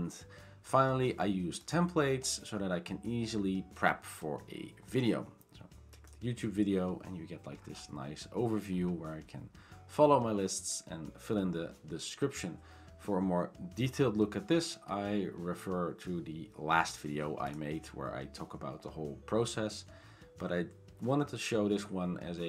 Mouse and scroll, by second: 6.8 click.